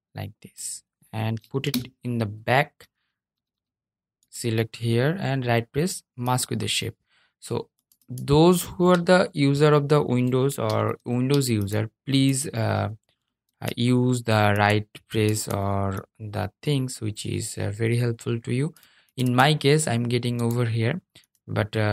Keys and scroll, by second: 9.8 super+z, 10.1 super+z.